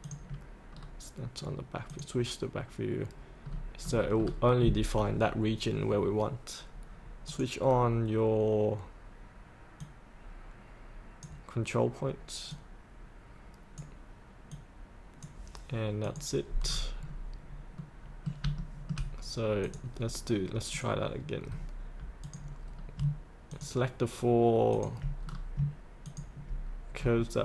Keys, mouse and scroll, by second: 0.7-1.9 scroll down 1, 1.9 click, 2.5 click, 3.4 scroll down 1, 7.2-13.6 drag, 13.7 click, 14.6 click, 16.7 scroll up 1, 17.8 middle click, 18.7 shift+middle click, 19.7 click, 21.5-22.2 scroll down 1, 22.2 click, 22.6-23.0 scroll down 1, 23.5 ctrl+click, 24.7 ctrl+click, 25.2-25.5 scroll down 1, 26.0 ctrl+click, 27.0-27.4 scroll up 1.